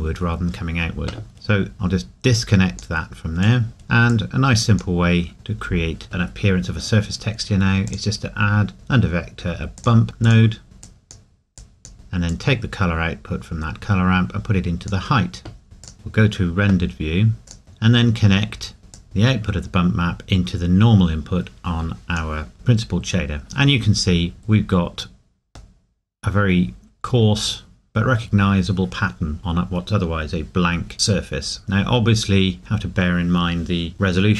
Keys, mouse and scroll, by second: 1.3-1.7 scroll down 1, 2.4 click, 3.6 middle click, 3.7 scroll up 1, 4.1 click, 5.3 middle click, 5.6-7.0 scroll up 1, 7.9 click, 10.6 scroll down 1, 10.8 click, 11.9-12.3 scroll up 1, 12.3 click, 15.6 scroll down 1, 15.8 click, 16.9 scroll down 1, 17.6-18.7 scroll up 1, 18.9 click, 22.5-24.3 scroll down 2, 24.3 scroll up 1, 24.4 scroll down 1, 25.8 middle click, 26.8 scroll up 1, 28.0 scroll down 1, 29.2 scroll up 1.